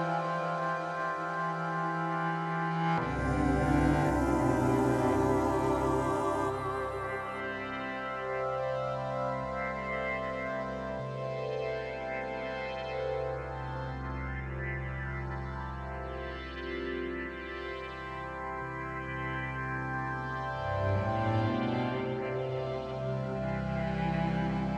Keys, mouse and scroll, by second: 1.9-6.1 drag, 9.5-11.6 drag, 12.2 space, 14.3 click, 16.7 click, 19.4 right click.